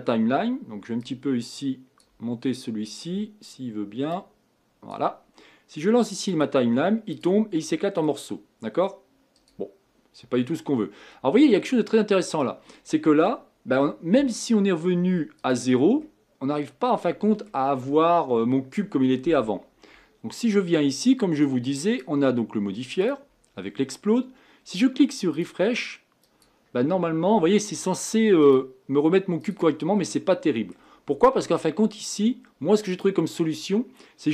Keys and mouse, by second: 4.2 right click, 4.4 click, 5.3-11.2 right drag, 7.6-9.3 drag, 7.6-9.3 middle drag, 11.2-15.4 middle drag, 15.4-17.1 drag, 16.0 middle click, 17.1-21.3 middle drag, 21.5 right click, 21.7-32.0 drag.